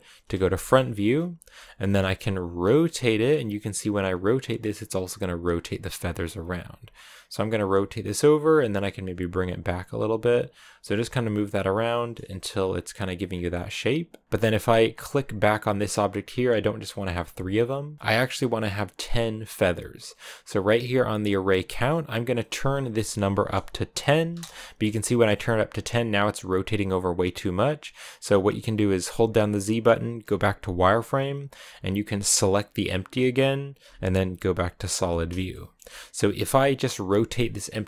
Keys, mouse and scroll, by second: 0.6-2.1 shift+middle drag, 2.1 r, 6.1 scroll down 1, 6.3 r, 7.3 g, 12.1-13.1 scroll down 2, 13.1-15.1 scroll up 1, 15.1 right click, 16.0-22.4 scroll up 1, 22.4-27.7 drag, 27.7-30.1 right drag, 30.1 z, 32.4-34.9 right drag, 34.9 z, 35.3-36.3 shift+middle drag, 36.3 r.